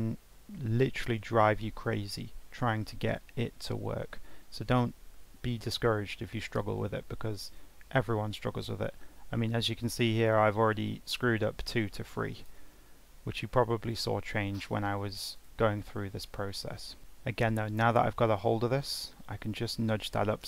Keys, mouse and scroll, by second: 7.6-10.6 drag.